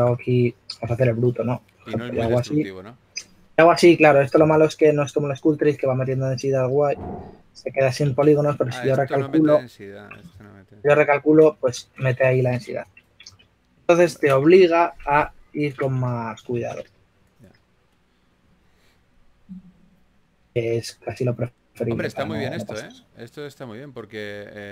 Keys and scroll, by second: 1.4-2.9 typing, 6.0 2, 12.0 shift+super+z, 13.1 super+z, 13.5 super+z, 15.6 super+z, 16.7 shift+f, 17.1 s, 18.1-18.9 typing, 22.2 5.